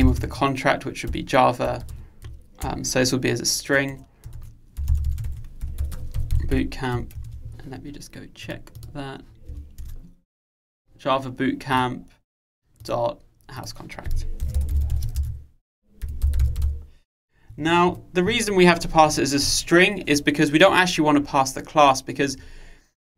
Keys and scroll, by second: 7.4 super+1.